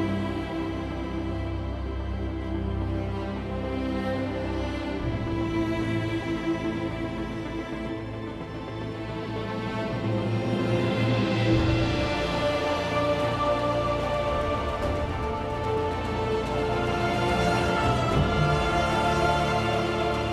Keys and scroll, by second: 7.6 r, 8.2 g, 13.4-14.1 typing, 18.2-18.6 typing, 19.8-20.3 typing.